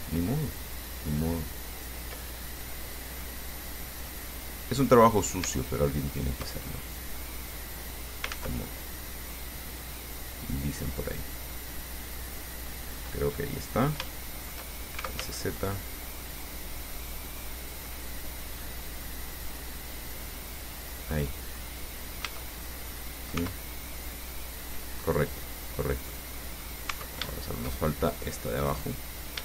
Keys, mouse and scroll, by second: 0.0 shift+right click, 2.0 shift+right click, 2.5 shift+middle click, 3.0 scroll up 2, 6.3 shift+right click, 6.8 shift+middle click, 7.2-8.5 drag, 8.5 ctrl+z, 8.9-12.1 ctrl+drag, 12.1-13.4 middle drag, 14.3 shift+middle click, 15.0-15.9 typing, 21.0 click, 21.3 click, 22.4 a, 22.8-23.1 scroll down 1, 23.1 click, 23.6 Tab, 24.1 scroll down 2, 24.5-26.8 middle drag, 27.2 Tab, 27.5 shift+middle click, 28.3 shift+scroll up 2, 28.9 right click.